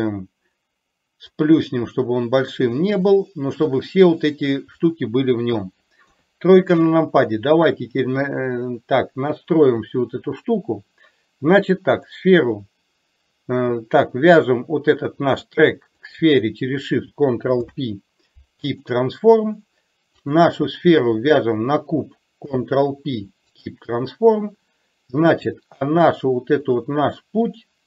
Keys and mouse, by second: 1.4-3.8 drag, 6.1 KP_3, 9.5 click, 12.0 click, 16.2 shift+click, 17.7 ctrl+p, 20.3 click, 21.2 shift+click, 22.5 ctrl+p, 25.3-25.8 middle drag, 26.7 click, 27.6 click.